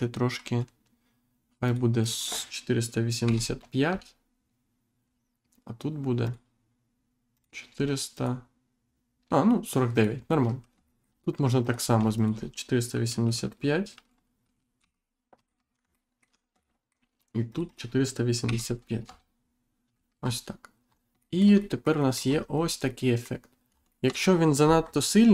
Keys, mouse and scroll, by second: 1.6 click, 3.8 Return, 5.0-5.4 scroll down 1, 6.2 click, 7.3 click, 8.1 click, 9.9 click, 10.4-10.8 scroll up 2, 10.8 shift+middle click, 11.6 click, 15.3 click, 15.9 alt+middle click, 16.6 shift+middle click, 17.5 click, 19.0 Return, 19.9 scroll down 1, 20.2-20.6 scroll up 1, 20.8-21.2 scroll down 2, 21.2 shift+middle click, 22.8 middle click, 23.7 scroll down 2, 24.2 scroll up 1, 24.8 Insert.